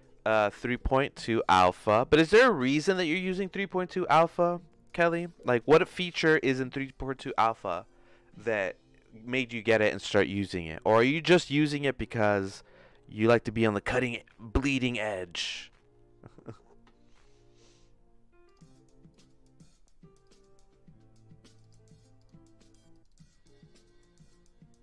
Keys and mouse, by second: 18.4-20.4 drag.